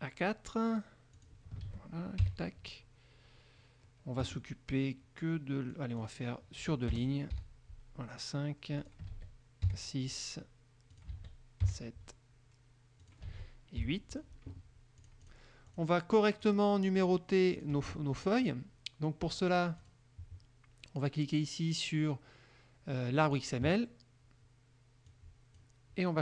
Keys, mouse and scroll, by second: 1.4 click, 1.8 ctrl+a, 2.4 ctrl+KP_4, 5.9 click, 7.1 BackSpace, 7.5 KP_5, 9.0 click, 9.8 ctrl+KP_6, 11.1 ctrl+click, 11.2 ctrl+a, 13.2 ctrl+click, 13.4 ctrl+a, 14.0 ctrl+KP_8, 15.2 click, 15.8 click, 16.6 click, 17.1 click, 17.7 click, 19.5 click, 20.0 click, 23.4 click, 25.2 click.